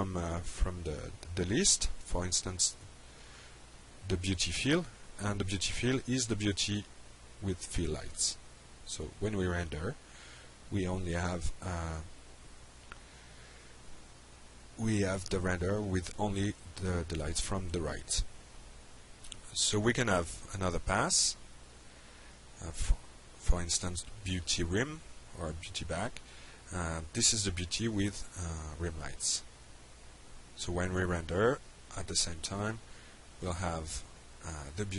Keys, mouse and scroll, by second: 3.0 click, 3.8 click, 9.3 click, 10.2 F5, 18.1 click, 19.5 click, 20.4 click, 23.1 click, 25.9 click, 29.3 click, 30.3 click.